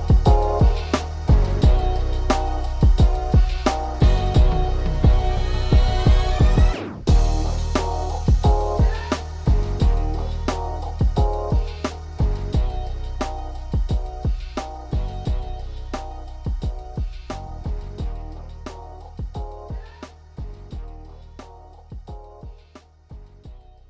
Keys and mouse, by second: 2.0 click, 3.9 click, 4.3 click, 4.9 click, 5.5 right click, 6.2 click, 8.6-10.3 typing, 11.7 KP_6, 17.9 click.